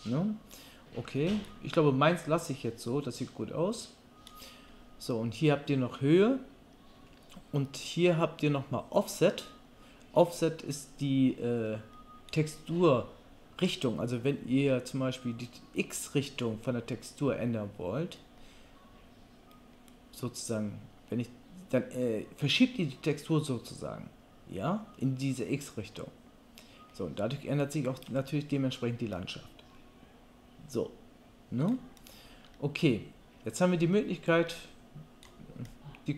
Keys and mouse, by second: 35.7 click, 35.7 middle click, 35.7 right click.